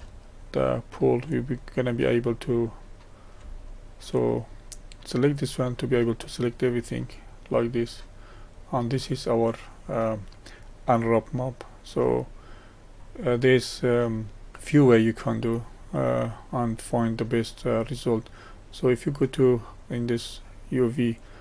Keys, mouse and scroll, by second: 0.3-5.3 shift+middle drag, 5.3-7.5 drag, 12.9-14.5 middle drag, 14.5-15.2 scroll up 2, 15.2 middle click, 16.9-19.0 right drag.